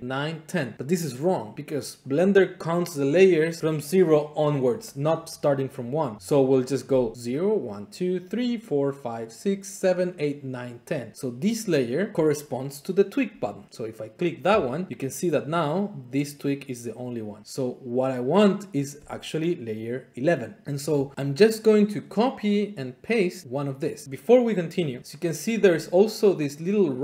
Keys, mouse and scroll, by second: 14.6 click, 20.6 click, 23.7 click, 24.9 click.